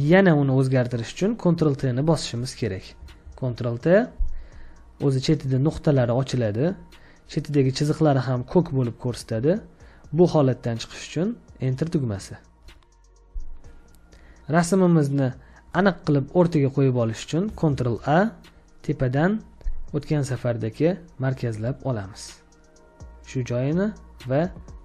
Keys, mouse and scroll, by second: 3.2 ctrl+t, 12.6 Return, 17.6 ctrl+a.